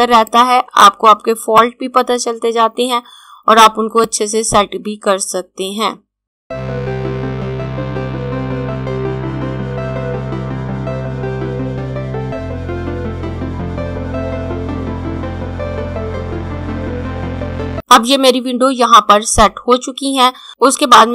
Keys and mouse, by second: 3.5 click, 6.7 click, 7.1 click, 8.4 click, 9.3 click, 11.5 click, 12.2 click, 13.5 click, 14.5 ctrl+d, 14.8 click, 15.1 click, 16.0 click, 16.8 click, 17.5 Left, 18.4 click.